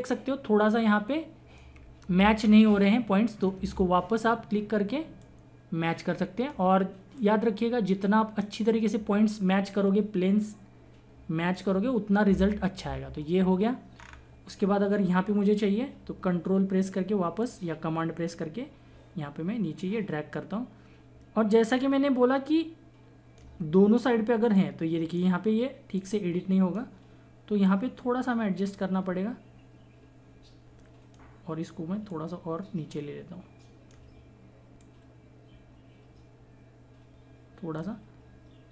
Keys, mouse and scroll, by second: 2.2 space, 2.6 click, 2.7 space, 5.2-10.5 drag, 10.7-13.9 drag, 14.0-15.1 scroll down 1, 16.5-17.4 scroll down 1, 17.4-21.8 ctrl+drag, 23.4-24.5 ctrl+drag.